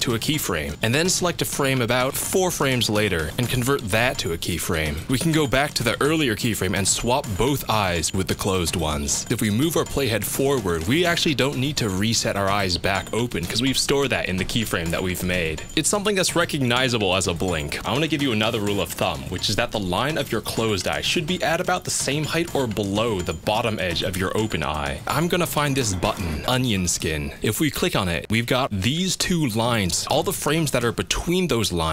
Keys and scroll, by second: 3.6 F6.